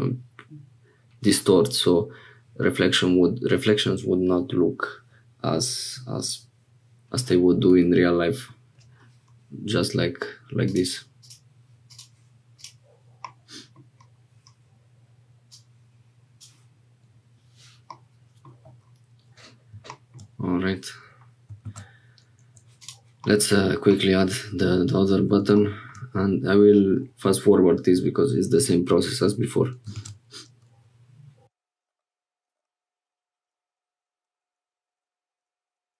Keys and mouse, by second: 10.7-12.1 drag, 13.2 middle click, 15.5 middle click, 17.9 middle click, 21.6 shift+a, 23.2 middle click, 29.9 shift+a, 31.7 click, 32.4 click, 33.0 click, 33.9 click, 34.9 click.